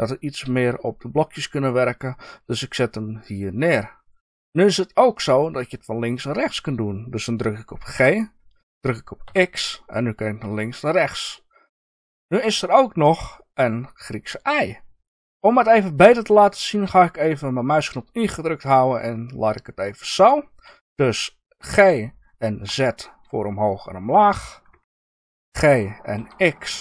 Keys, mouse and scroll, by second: 3.2 ctrl+click, 12.1 Escape, 16.6 middle click, 18.0-20.6 middle drag, 24.7 Escape, 25.4 g.